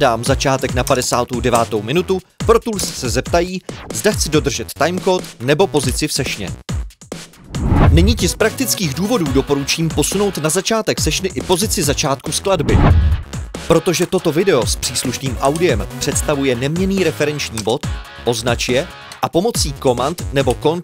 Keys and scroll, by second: 0.0 Left, 0.8-3.0 typing, 14.0 super+l, 17.5 super+l.